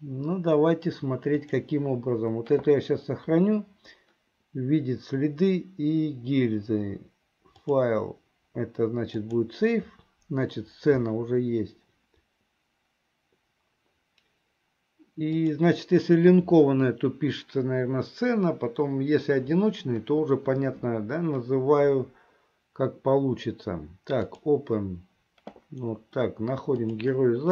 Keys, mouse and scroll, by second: 7.6-13.3 drag, 15.5-24.9 drag.